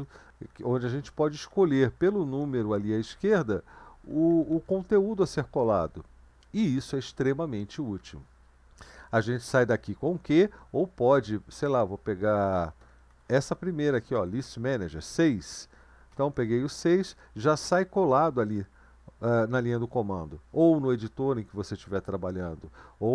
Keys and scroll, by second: 0.5 Down, 0.6 Down, 0.8 Down, 1.0 Down, 1.2 Down, 2.2 Up, 2.4 Up, 2.6 Up, 3.0 Up, 3.7 Down, 3.9 Down, 4.1 Down, 4.5 Down, 7.9 Down, 12.5 Up, 12.7 Up, 12.9 Up, 13.1 Down, 13.2 Down, 13.4 Down, 16.1 6.